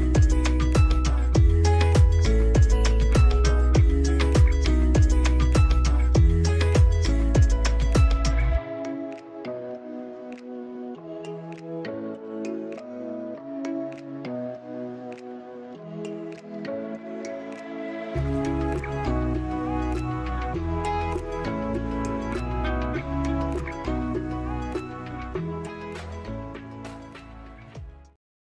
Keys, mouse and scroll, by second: 0.3 scroll up 1.